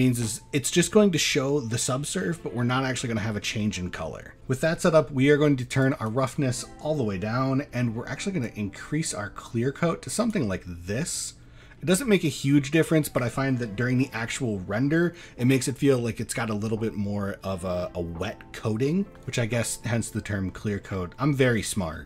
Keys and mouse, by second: 5.9 click, 8.5-10.3 drag, 11.6 middle drag, 20.9 middle click, 21.7-22.0 drag.